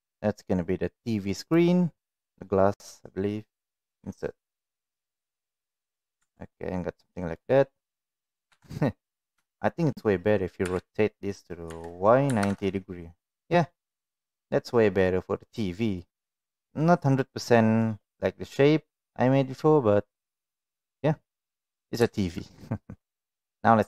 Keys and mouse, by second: 3.8 i, 6.0 click, 6.1 Tab, 6.5-7.3 middle drag, 8.4 KP_1, 9.5 shift+middle click, 10.6 r, 13.8-15.0 middle drag, 15.6 middle click, 16.7-17.8 middle drag, 23.2 click.